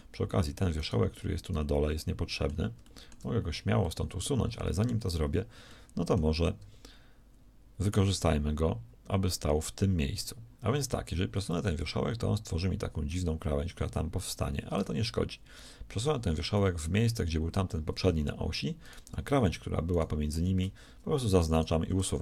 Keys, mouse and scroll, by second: 0.0 z.